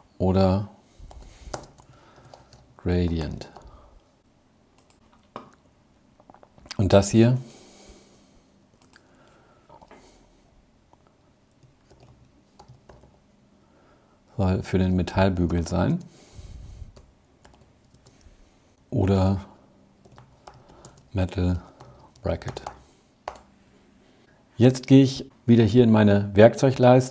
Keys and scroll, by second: 0.1 alt+7, 16.3 alt+7.